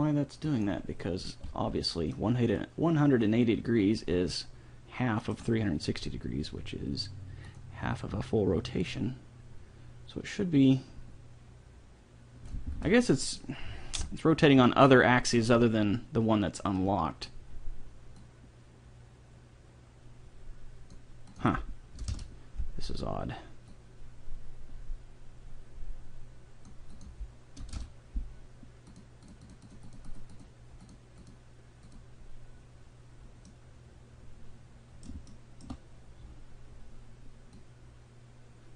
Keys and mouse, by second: 0.5-2.3 drag, 2.1-3.2 middle drag, 7.5-10.7 drag, 12.8 ctrl+z, 18.2-20.1 drag, 21.3-23.1 drag, 23.7-25.5 drag, 26.9-28.6 drag, 29.0-33.5 drag, 33.5-36.1 middle drag, 37.7-38.7 drag.